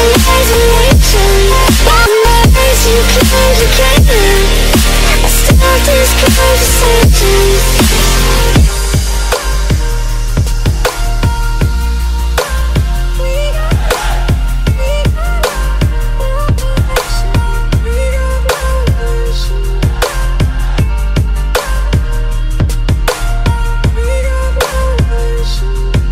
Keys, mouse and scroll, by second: 0.6-3.6 drag, 2.6 z, 8.8 click, 9.2 alt+Tab, 11.2-12.2 click, 11.9 click, 12.0 click, 12.6 ctrl+alt+z, 14.1 ctrl+space, 14.1 ctrl+click, 14.3 ctrl+click, 14.5 ctrl+space, 14.5 ctrl+click, 15.1 click, 15.4 ctrl+click, 18.0 click, 19.8 click, 21.2 shift+click, 21.5 ctrl+z, 22.8 click, 23.5 alt+click, 25.2 click, 25.9 alt+click.